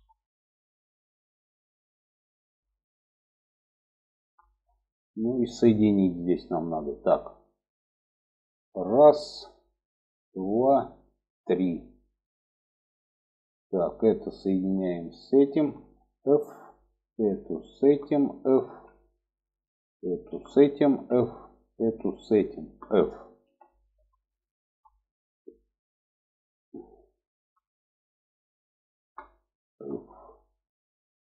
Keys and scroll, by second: 15.6 f, 17.9 f, 20.3 f, 22.7 f, 26.7 f, 29.1 f.